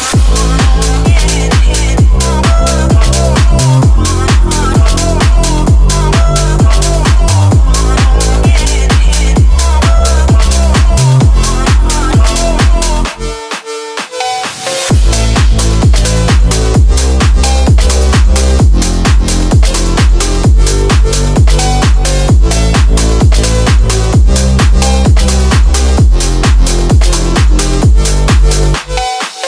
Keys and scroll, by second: 0.4 Escape, 3.3 space, 3.7 F3, 5.0 Escape, 6.5 shift+F2, 6.6 Escape, 10.4 F3, 11.0 ctrl+z, 12.4 c, 13.0 F3, 13.6 Escape, 15.1 ctrl+s, 21.2 F3, 23.6 Escape, 25.7 F3, 28.0 F3, 28.1 Escape, 28.6 F3.